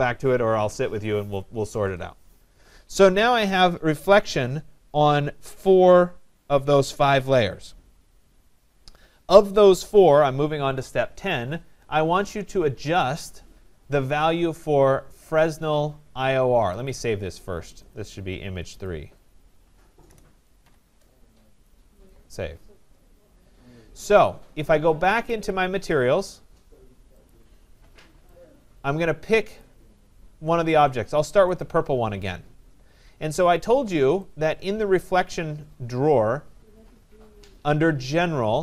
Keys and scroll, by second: 19.6 BackSpace.